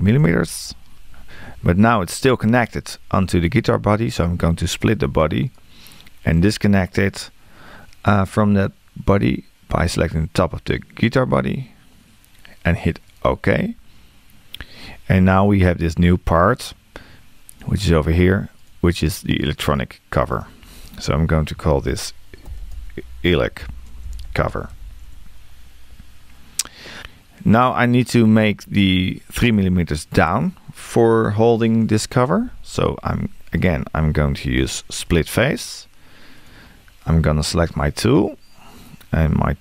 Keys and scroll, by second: 21.7 shift+e.